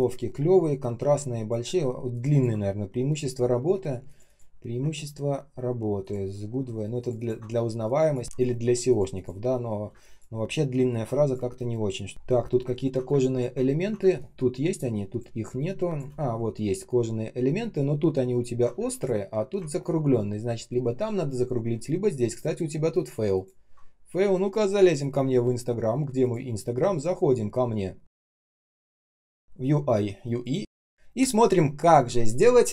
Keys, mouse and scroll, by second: 2.0 ctrl+click, 2.2 ctrl+click, 5.9 ctrl+click, 6.9 ctrl+click, 7.1 ctrl+click, 9.8-11.5 typing, 12.1 ctrl+scroll down 1, 13.0 space, 13.5 ctrl+scroll up 1, 13.9 space, 14.4 space, 14.4 space, 16.1 ctrl+scroll up 1, 16.8 ctrl+scroll down 1, 17.3-18.1 ctrl+scroll up 1, 18.1 ctrl+scroll down 1, 18.7 space, 19.2 space, 19.2 space, 19.6 ctrl+scroll up 1, 21.6-22.2 ctrl+scroll up 1, 23.2 ctrl+click.